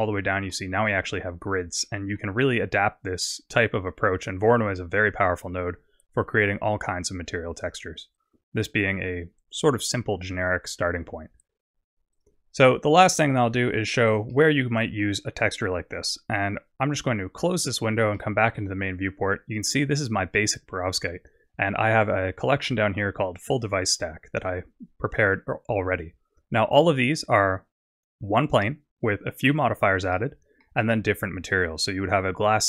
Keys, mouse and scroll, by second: 0.5 middle click, 1.3-1.8 scroll up 4, 1.8 middle click, 2.4 scroll down 3, 4.0-4.8 scroll down 2, 6.8 click, 8.6-9.6 scroll down 6, 12.3 click, 14.3 middle click, 15.3-15.7 scroll down 3, 16.8 click, 18.3 middle click, 18.8-19.5 scroll down 1, 19.5-20.2 scroll down 2, 23.5 click, 26.4-26.8 scroll up 1, 27.0 scroll up 2, 28.3 click, 30.2 middle click, 31.7 click.